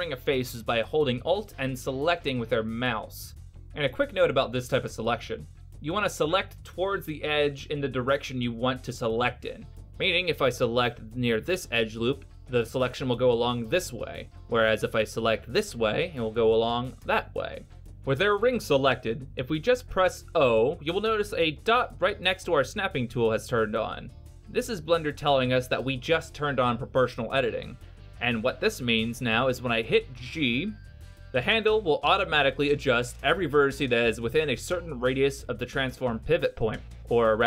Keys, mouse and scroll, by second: 4.4 middle click, 6.8 right click, 9.1 alt+right click, 11.0 alt+right click, 12.8 alt+right click, 15.1 alt+right click, 16.7 alt+right click, 21.2 o, 26.6 g.